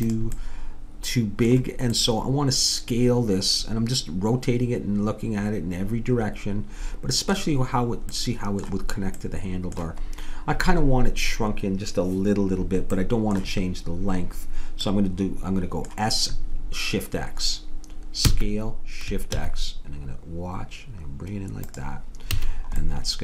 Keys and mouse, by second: 0.1-1.8 drag, 2.6-4.3 middle drag, 8.1-13.2 middle drag, 18.3 s, 22.3 a.